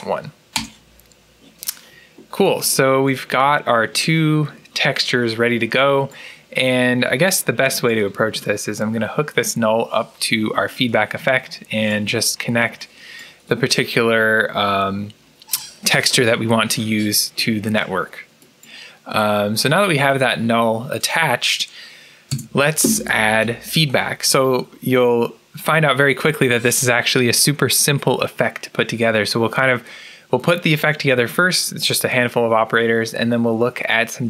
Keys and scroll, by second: 0.4 Return, 22.2 Tab.